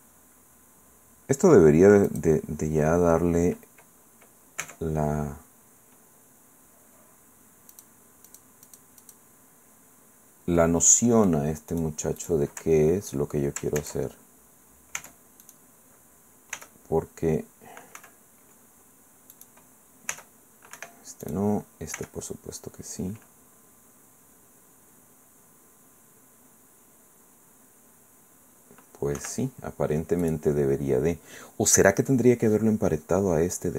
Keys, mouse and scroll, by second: 2.1 click, 4.6 Tab, 7.7 click, 8.3 click, 8.7 click, 10.6-12.0 drag, 12.2 click, 13.8 ctrl+Tab, 15.0 Tab, 15.4 click, 16.6 r, 18.0 Escape, 18.7-19.3 scroll down 2, 19.3 click, 20.1 r, 20.8 Escape, 21.2 click, 22.0 r, 29.2 Escape, 29.8-30.2 scroll up 1, 30.2 click.